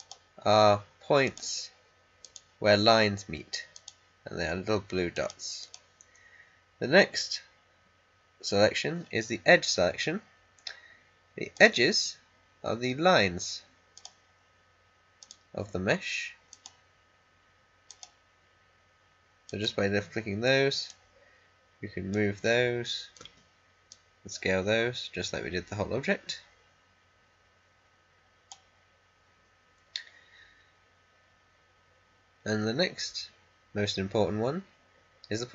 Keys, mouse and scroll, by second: 11.5 click, 13.8-23.1 drag, 23.1 r, 23.8-30.9 drag.